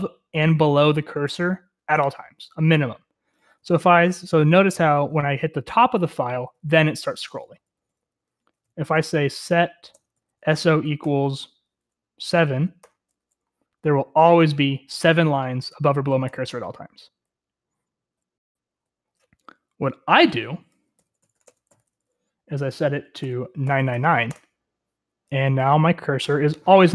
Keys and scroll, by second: 4.5 Escape, 4.5 shift+;, 4.8-6.2 k, 6.6 k, 8.3 k, 11.8-12.5 typing, 14.4-15.1 typing, 20.1-20.8 typing, 24.6-25.3 typing, 26.1 Return.